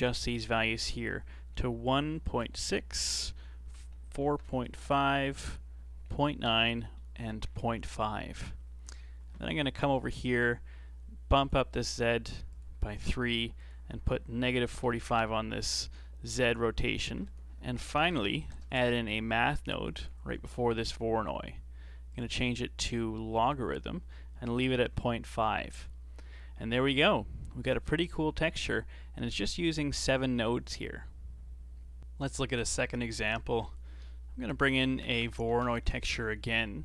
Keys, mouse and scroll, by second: 0.2-3.2 drag, 8.4-11.3 middle drag, 11.3-12.8 drag, 13.6-16.6 drag, 17.0 shift+a, 20.5-22.1 middle drag, 22.1-25.1 drag, 28.1-28.8 scroll down 8, 29.0-32.0 middle drag, 32.2 scroll up 2, 32.5 middle click, 33.5 shift+a, 35.1 BackSpace, 35.2 BackSpace.